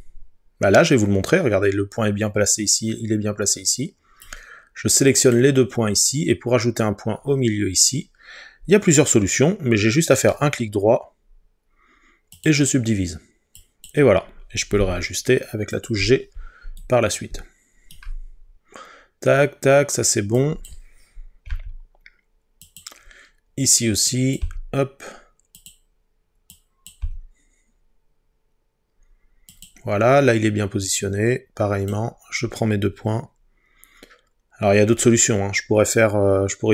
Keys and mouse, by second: 4.3 click, 10.3-12.6 right drag, 14.8 g, 15.8 click, 20.4 click, 21.5 g, 22.7-24.4 drag, 24.4 g, 25.6 click, 27.0 g, 29.5 click.